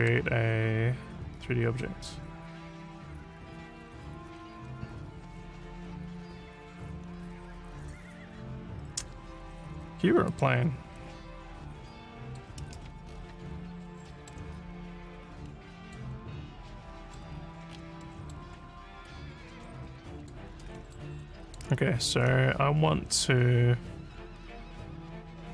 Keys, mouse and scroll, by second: 10.3 click, 12.2 click, 13.1-13.9 alt+scroll up 6, 14.1 alt+middle click, 15.0 click, 16.3 alt+middle click, 17.4-17.8 alt+scroll up 2, 18.0 alt+middle click, 19.1-20.3 drag, 20.5 e, 20.9 alt+click.